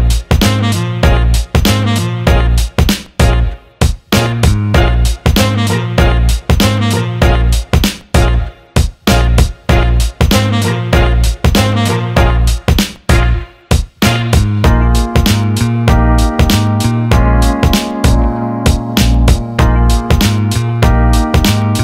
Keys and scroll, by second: 4.2 Delete.